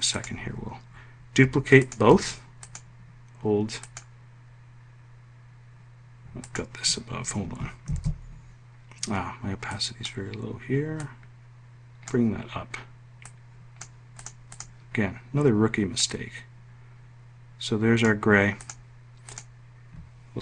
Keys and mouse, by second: 7.7 ctrl+shift+f.